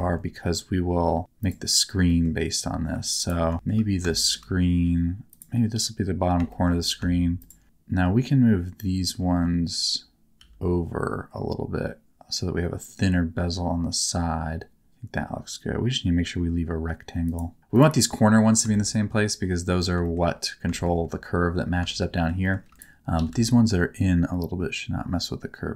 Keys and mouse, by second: 1.4 middle click, 2.1 middle click, 3.5 shift+middle click, 4.1 shift+middle click, 6.5 shift+middle click, 7.4 shift+click, 9.2 g, 10.4 g, 17.2 click, 18.7 shift+middle click, 20.0 shift+middle click, 20.7 shift+middle click, 21.9 shift+middle click, 21.9 shift+click, 22.1 shift+click, 22.4 shift+click, 22.7 click, 23.1 g, 23.3 g.